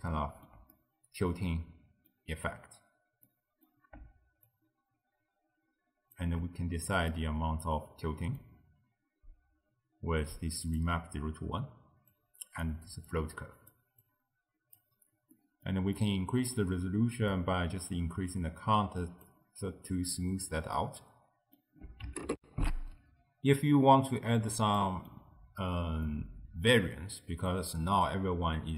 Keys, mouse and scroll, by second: 4.5-7.2 shift+drag, 7.2-10.2 middle drag, 10.4 click, 12.2-15.4 drag, 15.4-17.3 middle drag, 17.3-20.4 drag, 20.8-22.4 middle drag, 22.4 ctrl+alt+shift+w, 24.8-28.0 middle drag, 28.0 d, 28.2 click.